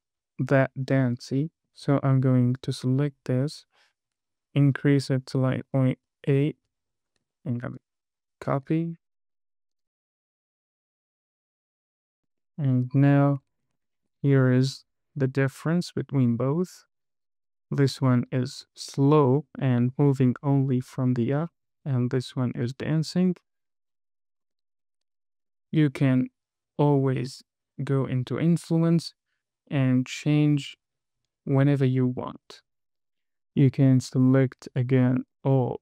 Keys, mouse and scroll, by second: 1.0-1.6 scroll up 2, 1.8 shift+middle click, 2.8 click, 3.8-6.6 drag, 7.8 super+c, 8.8 click, 9.9 super+v, 10.1 click, 10.3 super+v, 10.6 super+v, 10.8 click, 11.0 super+v, 11.4 super+v, 11.6 click, 11.8 super+v, 11.9 click, 12.1 super+v, 12.3-12.6 scroll down 2, 12.7 shift+middle click, 13.3 KP_1, 13.9 scroll up 2, 14.3 shift+middle click, 14.5 space, 24.8 space, 25.1-25.7 scroll up 2, 25.8 space, 33.2 click, 34.4 click, 35.0 click.